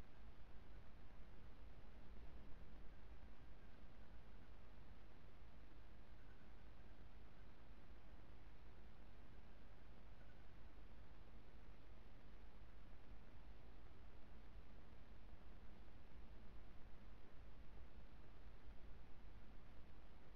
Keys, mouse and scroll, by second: 0.0 Escape, 2.5 r, 9.3-11.5 right drag, 10.6 g, 15.0 r, 15.9 click.